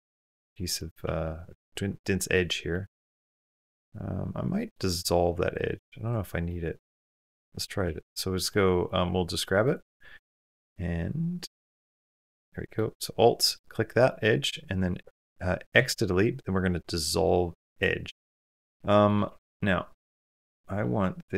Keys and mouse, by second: 0.6 middle click, 1.0 2, 1.8 middle click, 2.5 middle click, 3.0 shift+middle click, 3.4-4.5 middle drag, 6.3 middle click, 7.6 3, 8.3 middle click, 9.4 alt+click, 11.4 2, 11.7 alt+click, 12.3 middle click, 12.8 middle click, 13.9 middle click, 15.5 x, 18.0 middle click, 18.6 Tab, 19.1 shift+middle click, 19.4 middle click, 20.6-21.1 middle drag.